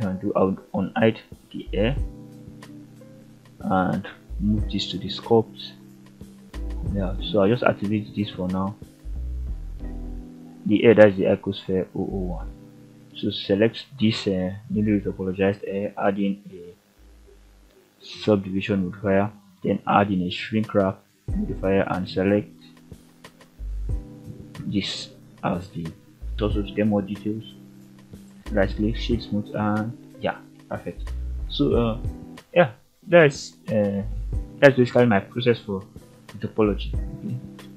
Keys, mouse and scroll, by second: 1.8 m, 5.4 click, 7.2 click, 8.3 click, 9.7 click, 10.3 click, 11.3 shift+z, 12.0 shift+z, 12.8-15.3 drag, 16.7-18.5 drag, 19.9 click, 24.4 click, 25.1-25.5 scroll down 2, 25.5 middle drag, 26.9 click, 28.0-28.7 scroll up 2, 29.2-30.0 right drag, 30.0 scroll down 2, 30.4 alt+a, 30.7 middle click, 31.5 shift+middle click, 32.0-32.4 scroll down 1, 32.4-32.9 middle drag, 33.4 shift+scroll up 1, 33.5 shift+middle click, 34.0-34.5 middle drag, 35.0-35.3 scroll up 1, 35.5 shift+middle click, 35.9-36.5 middle drag, 36.8-37.2 scroll up 2, 37.4 shift+middle click.